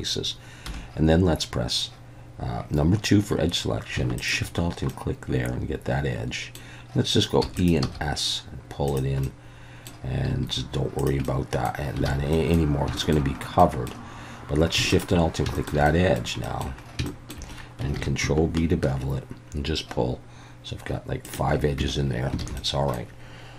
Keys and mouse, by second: 0.7 2, 4.9-6.6 middle drag, 7.4 e, 7.6 click, 7.8 s, 8.9 click, 9.2 middle click, 10.3 s, 11.0 click, 11.2 middle click, 12.1 alt+a, 12.3 middle click, 13.0 shift+middle click, 13.6 middle click, 14.9 alt+shift+click, 15.5 shift+middle click, 15.8 middle click, 16.4 middle click, 17.1 shift+middle click, 17.9 ctrl+b, 21.2 shift+click, 21.8 Tab, 22.4 alt+a, 22.6 middle click.